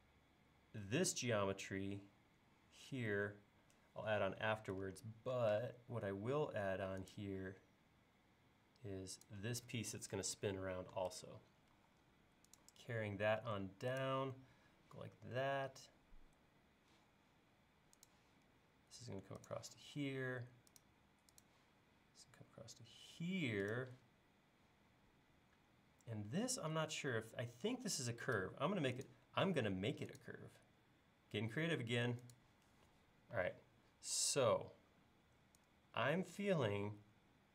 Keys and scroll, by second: 5.5 r, 11.8 l, 14.6 l, 28.4 a, 33.4 e.